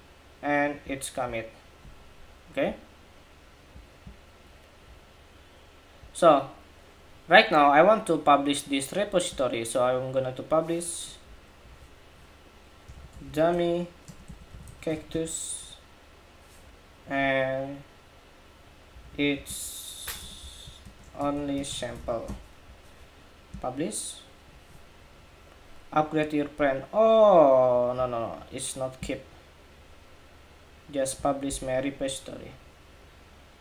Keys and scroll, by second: 11.4 super+a.